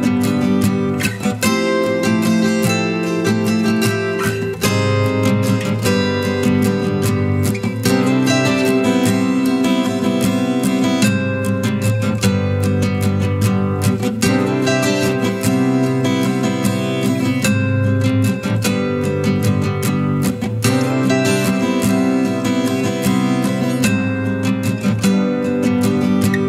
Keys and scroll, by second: 1.7 ctrl+j, 15.8 ctrl+j, 25.2 ctrl+space, 25.7 ctrl+space.